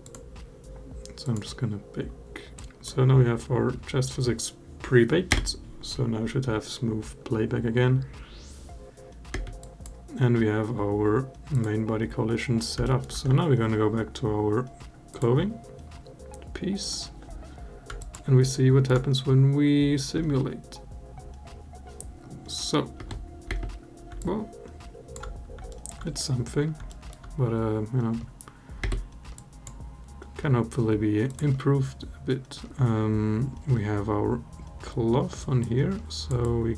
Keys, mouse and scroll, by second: 2.5 drag, 5.1 space, 9.1 space, 9.4 click, 11.3 click, 12.6 alt+middle drag, 14.9 click, 16.6 click, 17.8 alt+click, 18.3-18.7 alt+middle drag, 19.9 space, 22.7 space, 23.2 space, 24.0-24.9 alt+drag, 25.5 alt+middle drag, 26.7 alt+middle drag, 28.6 space, 29.1-29.5 drag, 35.4 click, 36.2 click.